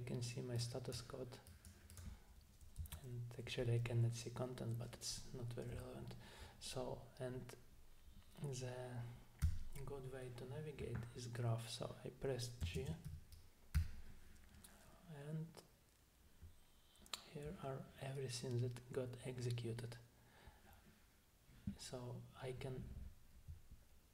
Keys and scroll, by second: 2.8 Down, 9.4 space, 12.8 alt+space, 13.1 g, 13.8 g.